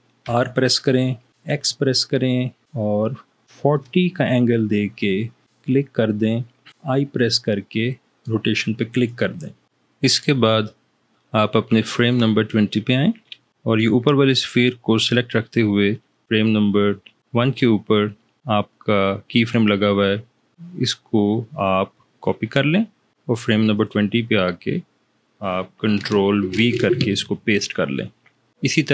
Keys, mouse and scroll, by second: 0.5 r, 1.6 x, 3.5 4, 3.8 0, 7.2 i, 12.0-13.6 drag, 21.5 right click, 23.9 click, 26.7 ctrl+v.